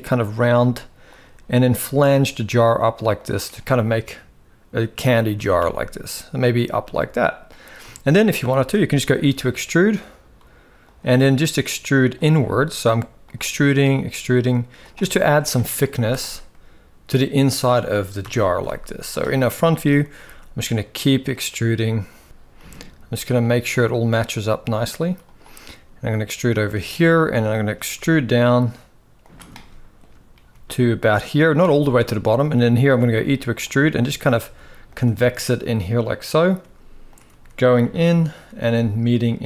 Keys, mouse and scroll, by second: 1.3 e, 2.1 e, 5.1 e, 6.7 shift+middle click, 7.7 shift+middle click, 8.2 shift+middle click, 9.1 e, 11.3 e, 12.7 e, 13.1 e, 14.8 e, 14.9 shift+middle click, 15.3 middle click, 15.9 z, 16.2-17.4 middle drag, 17.9 KP_1, 18.2 z, 19.3 shift+middle click, 20.6 e, 21.8 e, 22.3 ctrl+z, 22.3 e, 23.1 g, 24.1 g, 25.4 e, 27.0 shift+middle click, 27.7 e, 29.3 shift+middle click, 30.2 g, 31.4 shift+middle click, 33.1 e, 33.5 e, 34.7 e, 36.8 e, 37.0 e, 38.2 e.